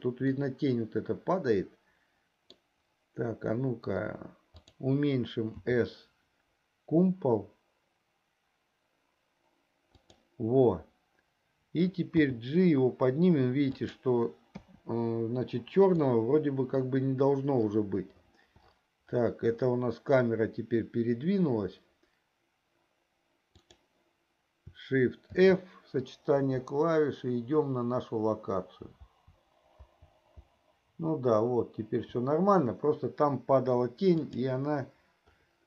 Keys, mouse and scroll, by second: 0.5-3.1 middle drag, 4.9-5.4 drag, 6.0 s, 12.3 g, 15.0 KP_0, 25.4 shift+f.